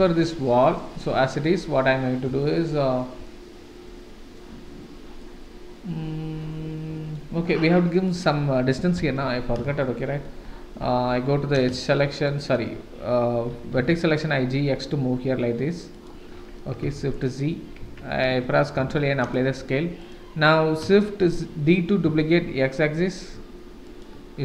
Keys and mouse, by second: 0.2-0.5 shift+middle drag, 0.9-1.6 middle drag, 2.4-3.0 shift+middle drag, 3.2-4.4 middle drag, 5.2-7.1 middle drag, 7.8 middle click, 8.9 KP_7, 9.2 Tab, 9.8 shift+right click, 9.8 shift+z, 11.1 1, 11.9 shift+click, 12.3 click, 13.5 g, 17.0 shift+z, 17.8 Tab, 18.7 ctrl+a, 21.2 shift+d.